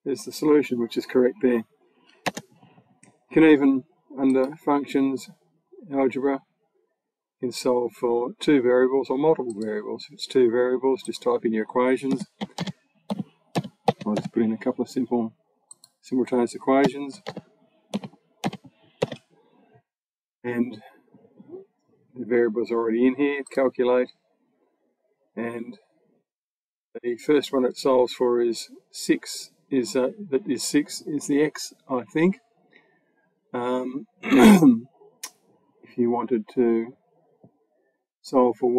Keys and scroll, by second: 2.1 BackSpace, 11.9-14.5 typing, 16.7-18.8 typing.